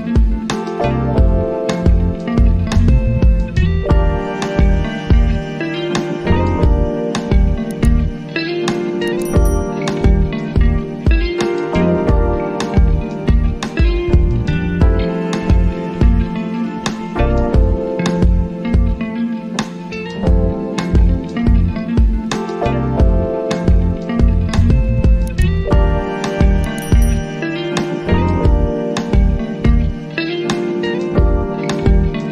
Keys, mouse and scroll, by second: 3.0-5.3 drag, 11.3 space, 14.1 space, 17.4 space, 23.1 click, 27.7 click, 32.1 click.